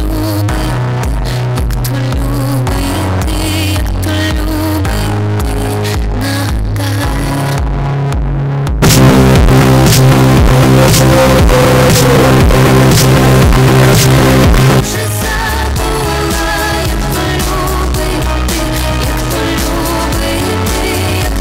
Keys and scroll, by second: 14.8 Page_Down.